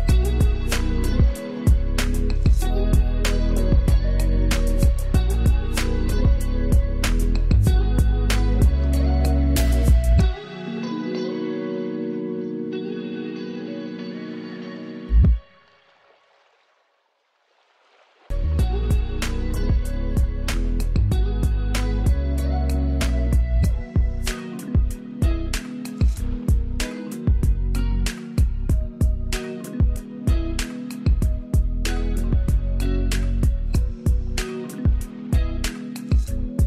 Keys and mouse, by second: 24.3 click, 25.3 ctrl+z, 26.3 ctrl+space, 27.3-36.6 drag.